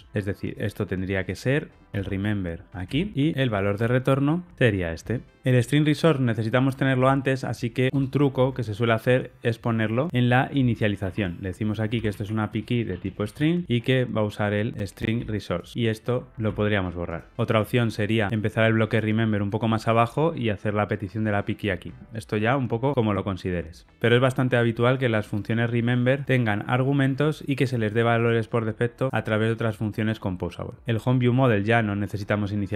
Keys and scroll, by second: 1.9 super+x, 4.5 alt+super+l, 10.1 ↻, 13.6 Escape, 15.1 super+x, 15.6 super+v, 15.7 Escape, 16.4 Escape.